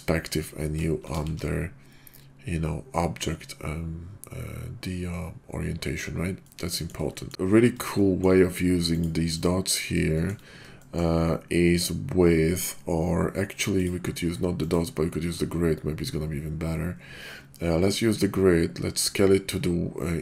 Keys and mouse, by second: 1.2 shift+v, 6.5-6.9 middle drag, 7.2 shift+click, 8.0 shift+drag, 8.9 click, 9.5 click, 10.1 shift+drag, 10.8 shift+click, 13.7 click, 14.4 click.